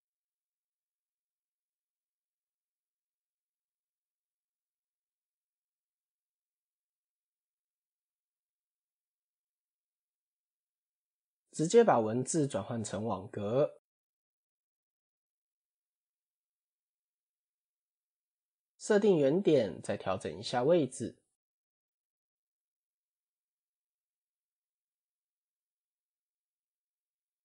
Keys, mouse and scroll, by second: 0.0-1.8 scroll down 11, 2.1-3.4 drag, 4.5-4.8 scroll down 4, 6.5-7.1 scroll down 4, 7.3 scroll up 7, 8.9 click, 9.7-10.1 drag, 10.6 click, 11.5-15.1 drag, 17.0-19.1 right drag, 20.2 alt+g, 21.8 click, 23.1-24.3 drag, 24.7 s.